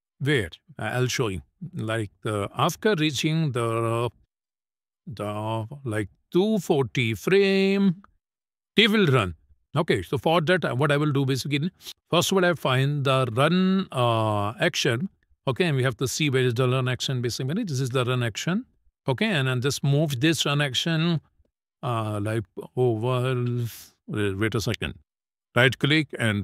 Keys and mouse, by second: 0.6 space, 2.7 click, 3.4 middle click, 4.5 click, 5.7 click, 6.3 click, 13.5 click, 15.6 click, 18.4 click, 18.9-24.2 drag, 25.1-26.3 right drag.